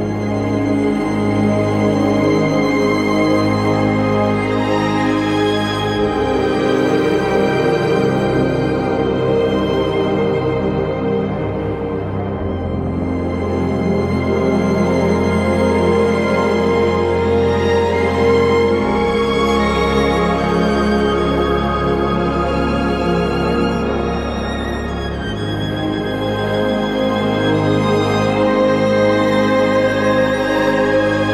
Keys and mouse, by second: 0.6 Tab, 1.0 2, 2.3 alt+click, 3.8 alt+shift+click, 4.2 alt+z, 10.5 alt+shift+click, 14.6 KP_3, 18.0 1, 19.1 g, 19.8 click, 21.5 shift+Tab, 22.2 g, 22.7 click, 24.8 g, 25.7 click, 28.9 g, 29.8 click.